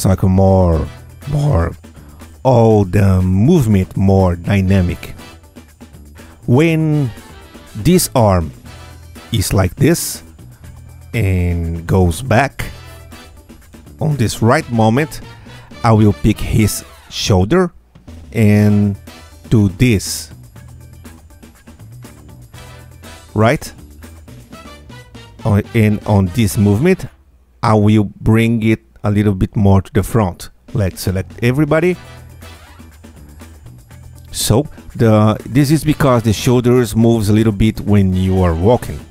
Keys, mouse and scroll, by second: 3.1-4.7 drag, 5.3 scroll up 1, 7.0-9.6 drag, 10.7-13.5 drag, 15.8 Tab, 16.3 click, 17.1 click, 18.6 Tab, 19.4 Tab, 20.2-22.4 drag, 22.3 Tab, 22.9 scroll down 2, 25.2 click, 27.1 Tab, 27.4 click, 28.1 click, 30.9 ctrl+a, 31.6 ctrl+F2, 31.9 Tab, 32.2-33.7 drag, 34.1-34.7 drag, 35.0-35.3 scroll down 1, 36.2 middle click, 37.2 Tab, 38.1 space.